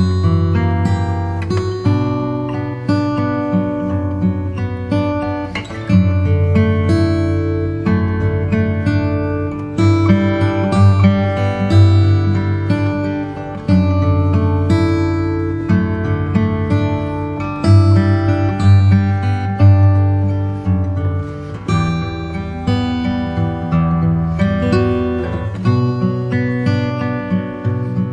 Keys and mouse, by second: 0.6 s, 5.3 click, 7.4 s, 11.4 shift+middle click, 14.2-15.4 drag, 17.1 e, 17.8 ctrl+r, 23.1 click, 24.5 s, 27.5 ctrl+r.